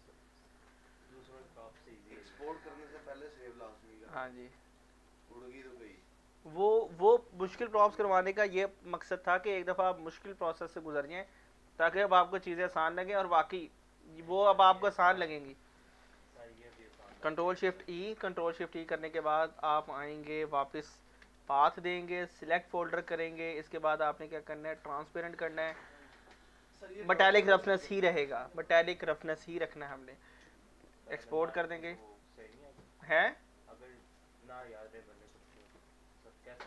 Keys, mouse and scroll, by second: 0.4 alt+click, 1.0 alt+right click, 1.5 alt+click, 2.5 alt+middle click, 2.8 alt+click, 3.2 alt+right click, 3.8 alt+click, 4.9 alt+middle click, 5.2 alt+right click, 5.5 alt+click, 5.9 alt+middle click, 15.7 scroll up 1, 15.9 scroll down 1, 17.8 ctrl+shift+e, 19.6 click, 21.0 ctrl+v, 22.4 click, 27.0 click, 31.1 click, 34.1 click, 34.9 alt+click, 35.7 ctrl+s.